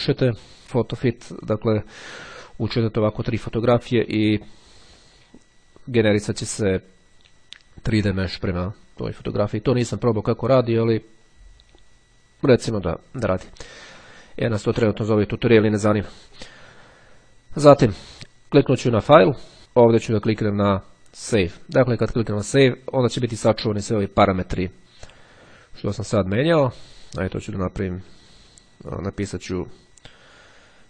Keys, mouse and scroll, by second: 1.0 click, 13.5-14.7 drag, 18.5-22.2 drag, 26.3 click.